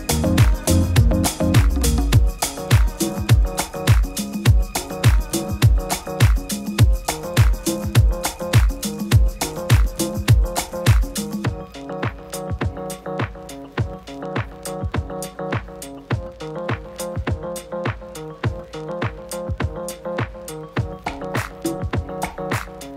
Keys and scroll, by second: 6.3 super+-, 6.4 super+-, 6.6 super+-, 7.1 super++, 10.8 super+g, 15.1 super+g.